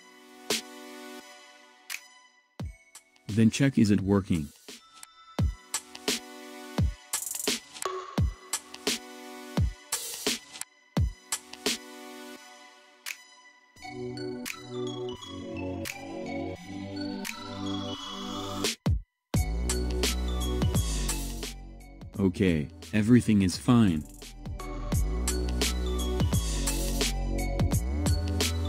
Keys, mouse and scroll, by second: 2.5-5.2 middle drag, 5.2 click, 6.7 click, 7.7-11.1 middle drag, 11.1-11.4 drag, 17.6-20.7 middle drag, 21.8 ctrl+z, 25.2 click.